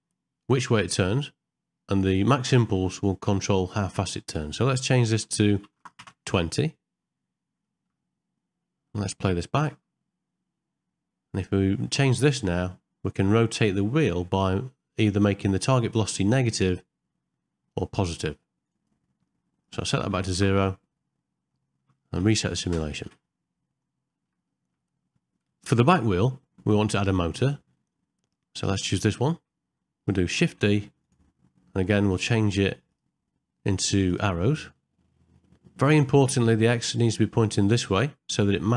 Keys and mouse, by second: 4.3-6.1 drag, 7.7 ctrl+middle click, 8.9 ctrl+middle click, 9.7 space, 11.9-18.7 drag, 19.6 click, 21.6 ctrl+middle click, 22.3 shift+Left, 22.7 space, 23.1 shift+Left, 24.2 ctrl+middle click, 24.5 shift+middle click, 24.9 middle click, 25.7 middle click, 26.3 ctrl+middle click, 30.5 shift+d, 32.9-34.2 drag, 34.8 ctrl+middle click, 35.6 shift+middle click, 36.1 ctrl+middle click.